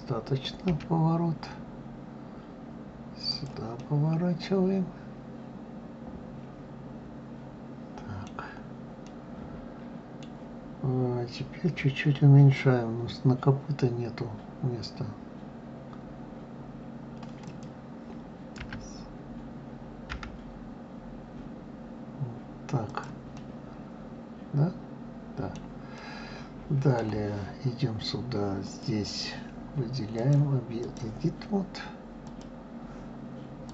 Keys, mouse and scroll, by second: 3.6-6.6 middle drag, 8.2 scroll down 2, 8.9-10.4 middle drag, 10.4 scroll up 2, 17.2 click, 18.4 s, 23.1-27.3 middle drag, 27.3-28.4 scroll up 2, 28.4 click, 29.9-32.2 drag, 33.5-33.7 drag.